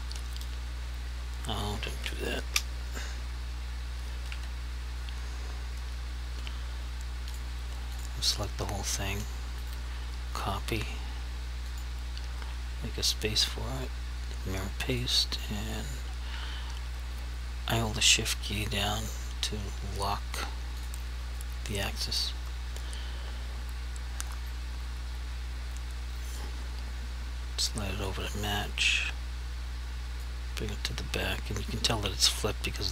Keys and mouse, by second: 2.4 Escape, 4.3 ctrl+z, 7.4 click, 9.7 right click, 11.8 click, 13.8 right click, 15.0 click, 20.9 shift+click, 26.5 click, 30.4 click.